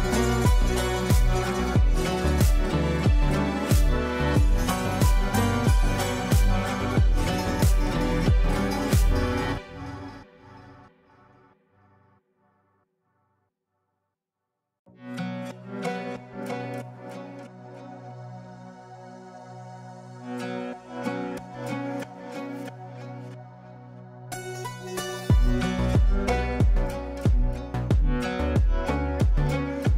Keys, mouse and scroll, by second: 0.4-1.4 drag, 2.4 space, 4.0-5.1 drag, 8.9 space, 10.1-15.2 drag, 16.8 space, 18.4 shift+click, 19.7-21.3 ctrl+drag, 21.9 F4, 23.5-23.9 drag, 24.9 F2, 25.5-25.8 click.